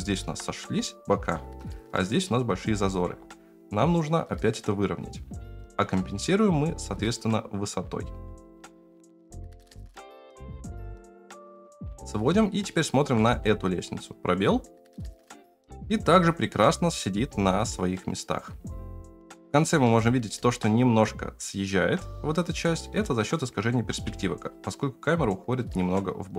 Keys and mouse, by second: 0.8 shift+middle click, 2.7 s, 8.3-11.7 typing, 12.7-13.0 shift+middle drag, 13.2 space, 19.9-20.4 shift+middle drag, 23.9 space, 24.5-26.3 drag.